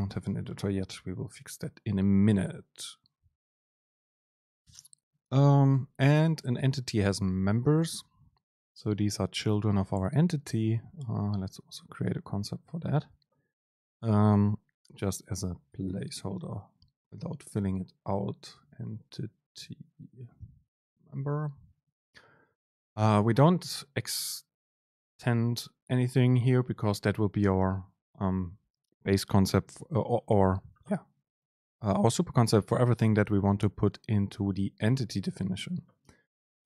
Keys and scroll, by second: 1.6 Down, 8.2 Down.